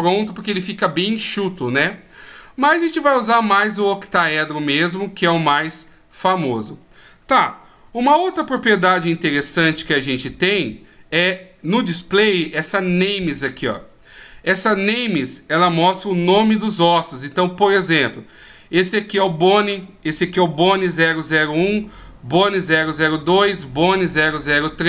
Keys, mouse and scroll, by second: 0.2 right click, 3.4 click, 4.6 middle click, 8.1-8.4 ctrl+scroll up 1, 8.4 ctrl+scroll down 1, 8.7-9.1 ctrl+scroll down 1, 9.1-9.5 shift+scroll up 1, 9.5-9.8 shift+scroll down 1, 9.8-10.3 shift+scroll down 4, 10.3-11.3 scroll up 1, 14.7 click, 18.3 right click, 20.3 right click, 21.7 right click, 23.4 right click.